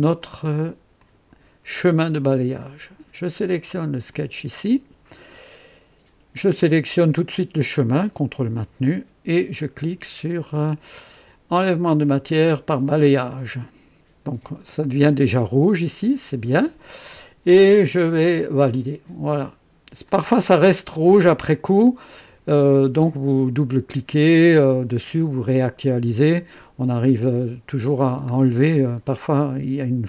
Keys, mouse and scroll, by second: 0.1 click, 1.0 click, 1.9-2.2 scroll down 1, 2.3 scroll up 2, 4.0 click, 8.1 ctrl+click, 12.6 click, 16.1 scroll up 2, 16.8 right click, 18.7 click, 20.0 click, 27.9 scroll up 2.